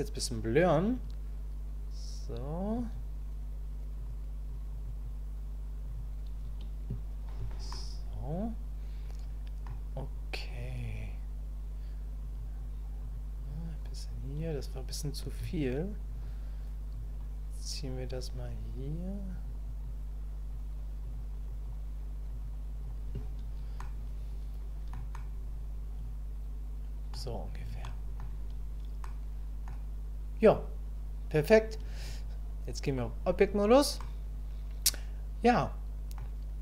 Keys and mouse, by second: 0.9-3.0 drag, 4.0 click, 4.5 click, 5.0-6.8 drag, 7.7-9.6 middle drag, 10.5-12.6 drag, 13.0 click, 13.5 click, 17.2-18.7 drag, 19.3 click, 19.8 click, 21.0 click, 21.5 click, 22.3 click, 22.8 click, 23.8-24.9 middle drag, 25.1-27.1 middle drag, 27.8 middle click, 29.0 middle click, 32.0-33.1 drag, 34.0-36.2 middle drag.